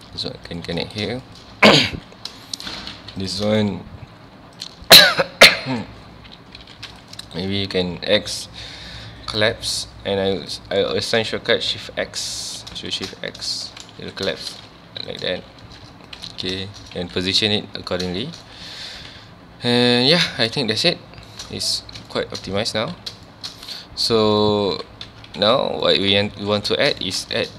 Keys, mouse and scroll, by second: 0.5 shift+click, 1.2 shift+middle click, 1.5 alt+a, 1.9 2, 2.5 shift+middle click, 2.9 1, 3.2 click, 4.6 shift+click, 6.7 2, 6.9 click, 7.3 right click, 7.9 x, 13.0 shift+x, 13.4 scroll down 2, 13.7 shift+middle click, 13.9 ctrl+s, 14.4 shift+middle click, 14.9 1, 15.1 click, 15.5 g, 16.2 click, 16.3 alt+a, 16.6 shift+middle click, 17.0 ctrl+s, 18.2 shift+middle click, 18.5 scroll up 1, 18.8 ctrl+s, 20.1 scroll down 2, 20.4-21.8 shift+middle drag, 21.8 scroll down 2, 22.1-22.5 shift+middle drag, 22.5 scroll up 2, 22.8 ctrl+s, 23.3-23.6 shift+middle drag, 23.6-24.2 scroll down 2, 24.2 scroll down 1, 24.3-24.7 scroll up 2, 24.7 z, 25.1 Tab, 25.4 alt+a, 25.7 scroll down 1, 25.8-26.2 middle drag, 26.2 Tab, 26.4 scroll up 1, 26.5 a, 27.0-27.5 shift+middle drag.